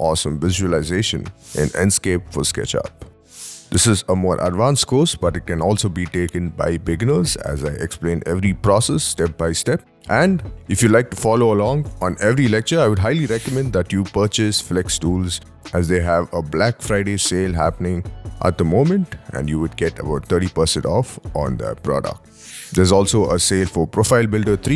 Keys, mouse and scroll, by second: 0.3 double click, 0.8 ctrl+z, 1.1 scroll down 5, 1.6 shift+middle click, 3.2-3.6 scroll down 1, 3.6 middle click, 9.8 right click, 11.8 5.